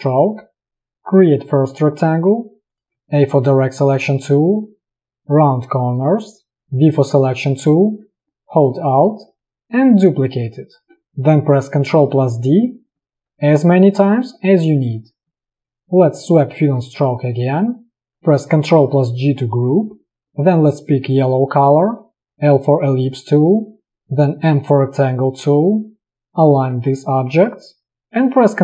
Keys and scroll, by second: 1.8 v, 3.0 a, 6.7 v, 12.3 ctrl+d, 15.7 space, 18.8 ctrl+g, 20.3 i, 22.2 l, 24.4 m, 26.2 v.